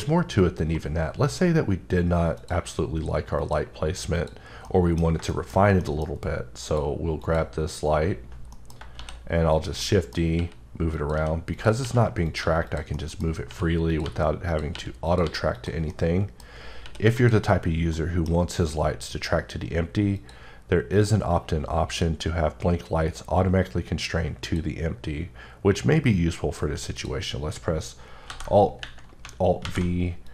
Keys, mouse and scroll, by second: 0.0 scroll down 1, 1.0-1.3 scroll down 2, 2.3 click, 3.4 click, 4.1 click, 4.6 middle click, 5.0 scroll down 2, 5.3 shift+middle click, 5.6 scroll up 1, 5.8 middle click, 6.6 click, 7.2 click, 8.2 scroll down 3, 8.5 middle click, 9.2 shift+d, 9.8 middle click, 10.2 scroll down 1, 10.3 r, 10.9 click, 11.1 g, 11.5 click, 11.8 r, 12.2 click, 12.4 g, 12.7 click, 12.9 middle click, 13.5 r, 13.9 click, 14.0 g, 14.5 click, 14.7 r, 15.1 click, 15.2 g, 15.5 click, 15.9 middle click, 16.5 scroll up 1, 16.8 r, 17.1 click, 17.9 middle click, 20.2 click, 20.9 click, 24.4 click, 26.9 click, 28.3 alt+b, 29.6 alt+v, 30.2 click.